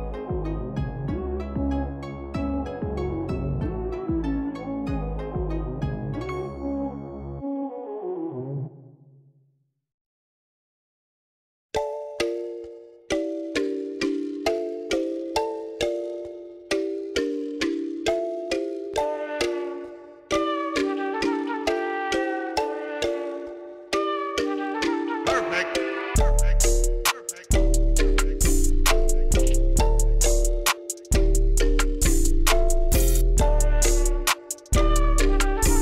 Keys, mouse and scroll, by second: 0.9 a, 5.0 click, 7.8 click, 9.2 click, 10.2 click, 11.2 click, 12.7 click, 15.6 click, 17.4 click, 18.1 click, 21.1 click, 29.8 d, 32.1 a, 32.8 d, 34.6 click.